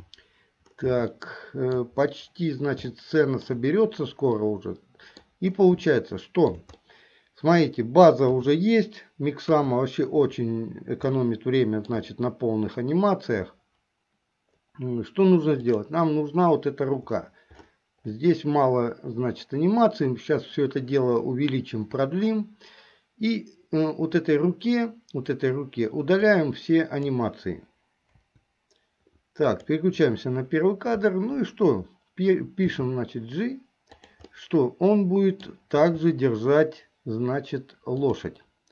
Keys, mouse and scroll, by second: 1.3 shift+middle click, 3.1 shift+middle click, 4.5 middle click, 6.0 shift+middle click, 6.9 middle click, 8.4 KP_3, 9.5 KP_1, 11.3 shift+middle click, 15.7 click, 26.3 click, 28.3 Delete, 29.6 click, 32.8 g, 34.4-35.6 middle drag, 35.6 scroll down 1, 36.0 g.